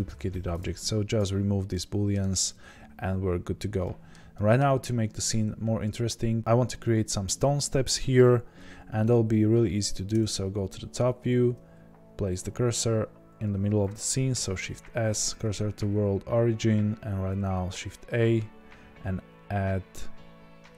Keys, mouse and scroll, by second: 0.6-1.2 drag, 1.7-20.7 middle drag, 10.1 KP_7, 15.4 shift+s.